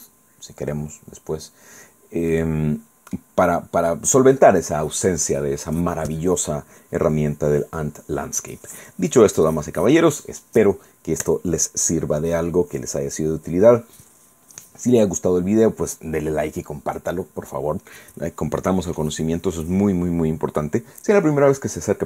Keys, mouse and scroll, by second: 0.9 scroll down 2, 2.3-3.4 drag.